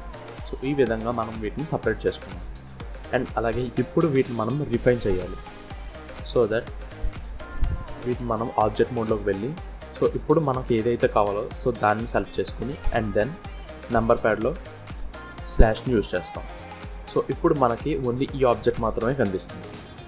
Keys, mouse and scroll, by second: 0.8-1.3 scroll up 1, 1.3-1.8 scroll down 3, 1.8 click, 2.5-3.0 scroll up 2, 3.0 scroll down 1, 3.5 scroll up 2, 3.9 scroll down 3, 4.5-5.0 scroll up 2, 5.2 Tab, 6.0 scroll down 1, 6.1 Tab, 6.9 Tab, 7.1 click, 7.7 scroll down 1, 8.0 middle click, 11.3 click, 12.3-12.6 scroll up 1, 13.0 scroll up 1, 13.3 shift+middle click, 17.0-17.3 scroll down 2, 18.8-19.2 scroll up 1, 19.2 middle click.